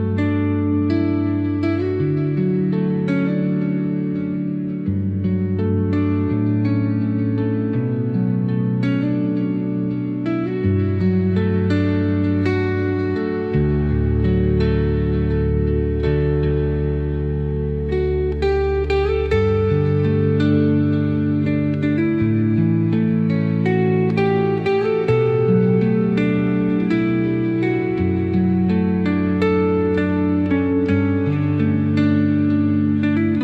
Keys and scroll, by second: 0.2 space, 2.7 ctrl+z, 5.6 Delete, 9.0 Delete, 22.6 shift+Page_Up.